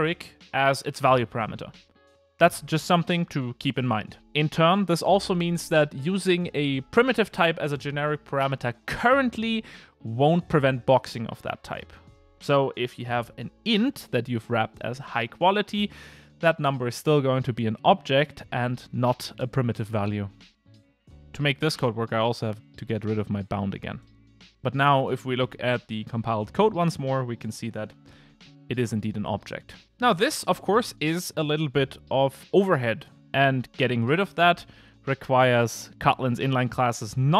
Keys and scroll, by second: 19.7 super+z, 26.3 super+f.